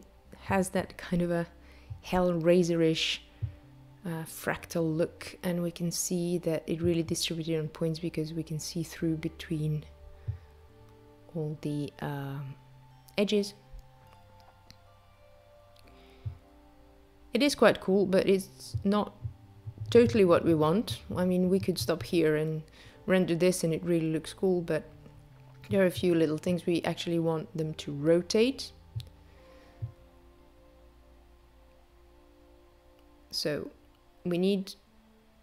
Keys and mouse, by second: 24.6 click, 27.1 click, 29.7 click, 31.1 click, 32.7 click, 34.9 click.